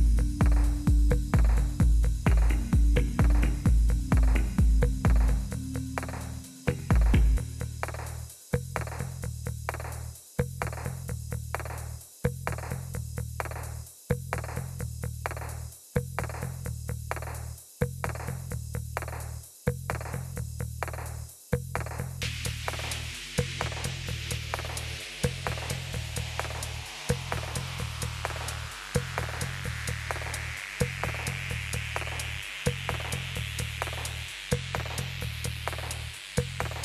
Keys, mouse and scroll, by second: 3.0 Right, 3.5 Return, 14.1 Down, 14.4 Down, 14.8-16.2 Down, 16.5 Up, 19.5 Up, 19.9 Up, 20.2 Up, 20.4 Up, 22.7-24.1 Up, 31.9 Right, 32.8 Return.